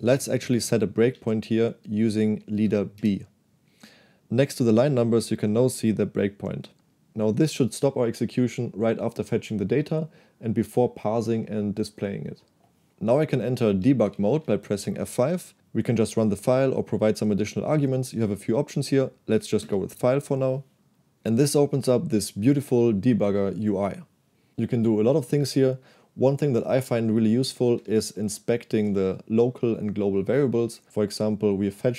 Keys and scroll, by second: 1.1 k, 2.7 space, 3.0 b, 14.1 F5, 19.7 Return, 28.1 ctrl+h, 28.9 ctrl+k, 29.5 k.